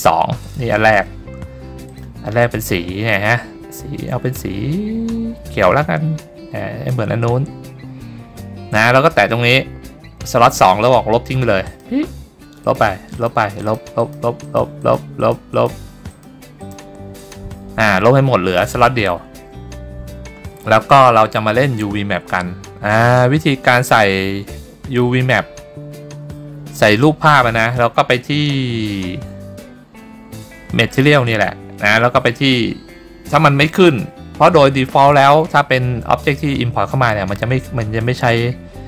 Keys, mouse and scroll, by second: 0.5 click, 2.0 click, 8.8-10.3 drag, 11.8 click, 12.7 click, 13.3 click, 13.7 click, 14.1 click, 14.6 click, 14.9 click, 15.3 click, 15.7 click, 16.2 click, 16.7 click, 17.3 click, 24.0-25.4 middle drag, 29.6 scroll down 3, 29.9-30.3 scroll up 3, 30.5-31.0 shift+middle drag.